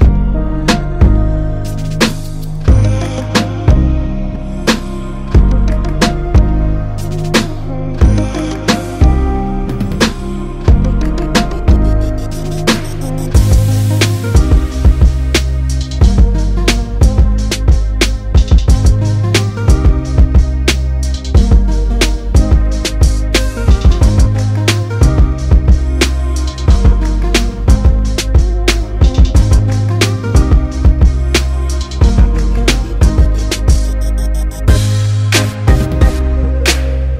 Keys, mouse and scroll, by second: 5.7 i, 6.7-8.1 drag, 24.9-31.4 drag, 32.9 i, 35.1-36.5 drag.